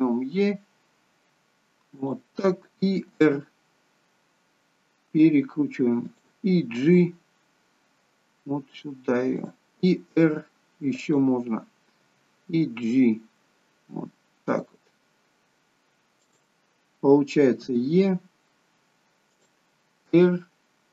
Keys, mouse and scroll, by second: 0.0 e, 3.2 r, 6.8 g, 10.2 r, 12.0 g, 17.7 e, 20.2 r.